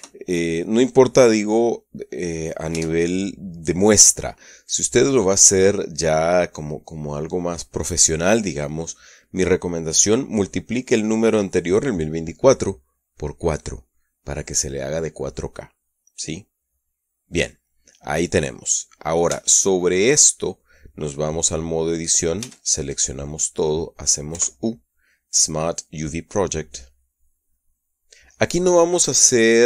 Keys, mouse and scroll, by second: 0.1 KP_Multiply, 0.4 KP_2, 3.2 Tab, 17.0 click, 19.8 Tab, 22.9 a, 24.8 u, 26.9 click, 28.0 click.